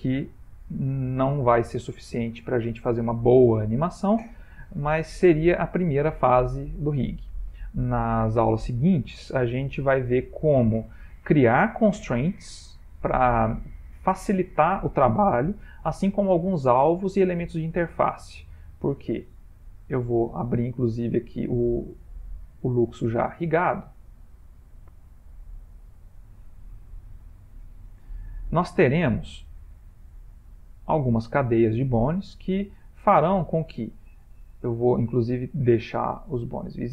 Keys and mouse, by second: 2.2 middle click, 6.0 middle click, 6.9 ctrl+middle click, 7.8 middle click, 19.8 ctrl+s, 21.4 click.